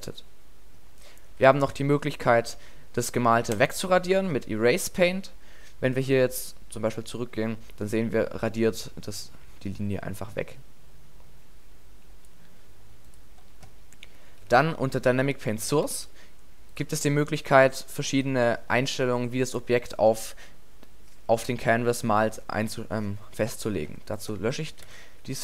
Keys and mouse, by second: 1.4 alt+a, 14.4 alt+a, 15.9 alt+a, 18.9 middle click, 23.9 x.